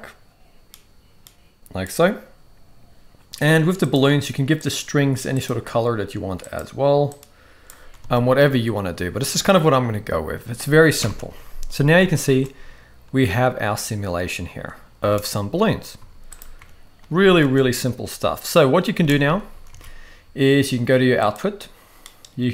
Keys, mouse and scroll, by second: 3.8 click, 4.6-5.8 drag, 8.0 alt+a, 11.0 shift+Left, 12.2 space, 15.1 space, 15.9 z, 17.1 ctrl+s, 17.2 ctrl+s, 17.4 space, 18.9 space, 19.6 ctrl+s, 19.7 ctrl+s, 21.3 click.